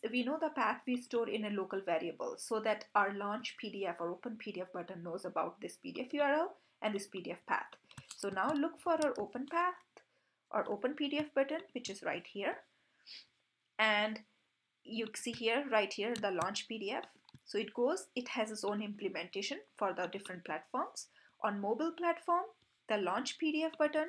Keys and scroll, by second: 9.0 super+f, 11.7 super+b, 17.4 super+b.